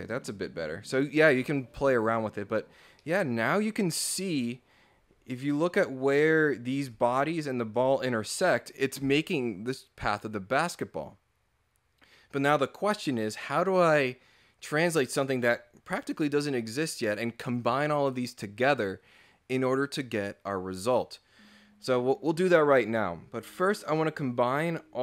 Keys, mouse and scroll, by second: 2.0 click, 2.9 scroll up 1, 3.0-4.4 middle drag, 5.0 scroll down 2, 6.6 scroll up 1, 6.9 click, 7.8 click, 8.0 scroll down 2, 23.2 scroll up 2.